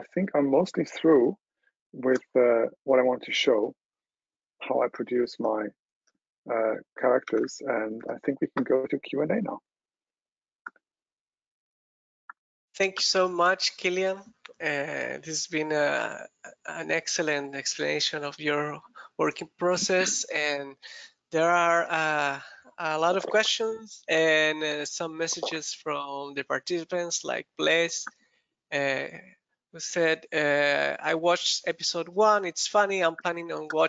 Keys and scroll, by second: 7.2 super+w.